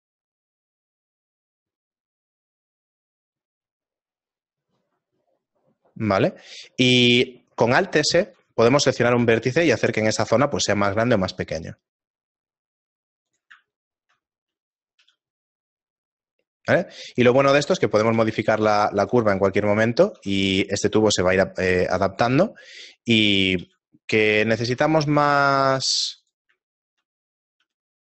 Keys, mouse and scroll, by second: 8.2 alt+s, 13.7 shift+middle click, 14.6 right click, 15.0 g, 17.9 shift+middle click, 18.3 g, 19.6 right click, 20.2 r, 21.1 g, 22.2 r, 23.0 middle click, 24.1-24.6 scroll down 4, 24.1 g, 24.6 r, 25.3 s, 26.7 shift+middle click, 27.6 g.